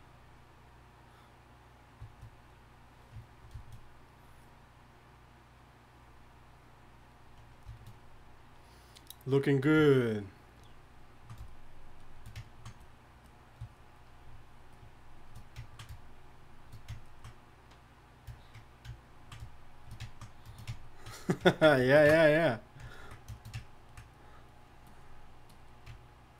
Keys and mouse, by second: 15.4-18.0 drag, 20.6 click, 24.1-26.3 drag.